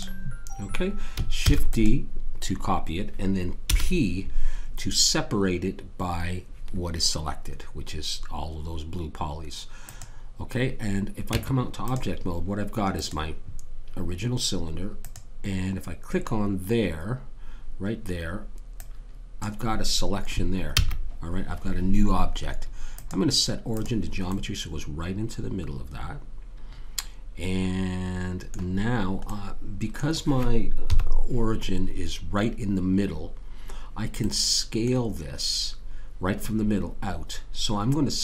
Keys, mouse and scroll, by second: 1.5 shift+d, 3.7 p, 11.3 Tab, 12.9 click, 15.0 click, 17.6-18.8 middle drag, 18.8 click, 20.7 ctrl+z, 22.9 click, 24.9-26.5 middle drag, 29.3 middle click, 29.7-30.9 middle drag, 30.9 KP_1.